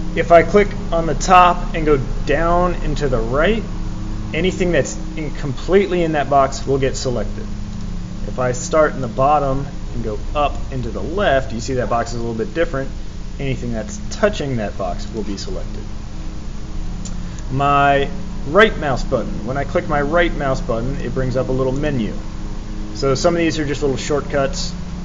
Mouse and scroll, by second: 0.6-6.6 drag, 7.7 click, 9.0-14.1 drag, 15.0 click, 17.3 right click, 21.7 right click.